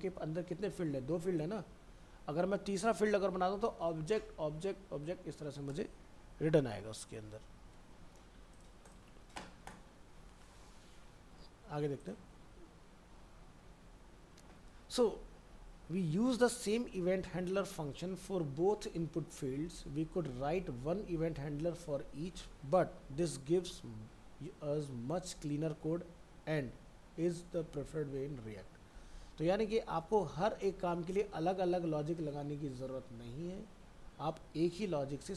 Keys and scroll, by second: 9.0 alt+Tab, 10.1 ctrl+s, 11.1 alt+Tab.